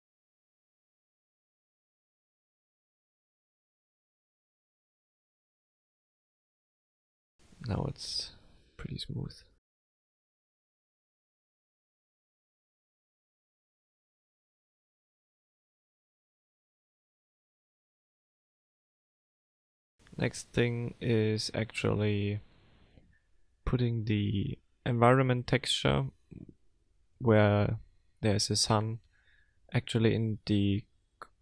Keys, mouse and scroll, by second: 4.1 click, 5.3 F12.